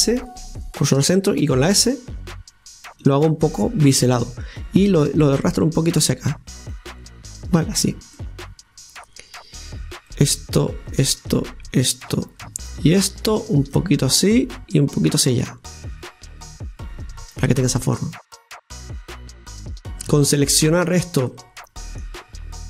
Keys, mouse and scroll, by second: 1.3 s, 3.4-4.8 middle drag, 4.8-8.1 drag, 8.1-9.9 middle drag, 9.9 click, 10.1-12.2 right drag, 12.2 scroll down 1, 12.9 shift+right click, 13.7-17.5 drag, 17.5 scroll down 2, 17.8-19.9 middle drag, 19.9 right click, 21.3-22.6 middle drag.